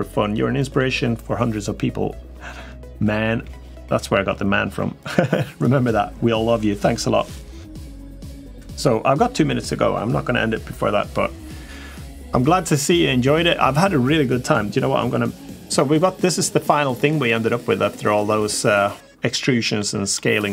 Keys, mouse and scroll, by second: 16.5-19.5 middle drag, 19.9-20.2 middle drag.